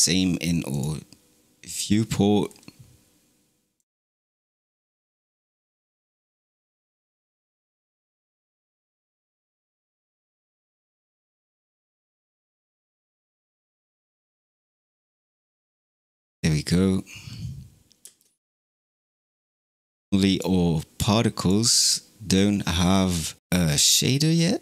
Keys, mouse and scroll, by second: 0.7 drag, 2.5 scroll down 2, 3.6 click, 4.6 click, 5.8 scroll up 3, 6.3 click, 7.1 click, 7.5 click, 8.0 click, 8.7 click, 9.2 click, 10.5-12.0 scroll down 21, 13.0 click, 13.7 scroll down 5, 14.6 click, 15.6 drag, 16.4 click, 18.0 space, 19.4 space, 20.3 click, 21.4 click, 22.7-23.2 scroll down 8, 23.4 click, 24.1 click.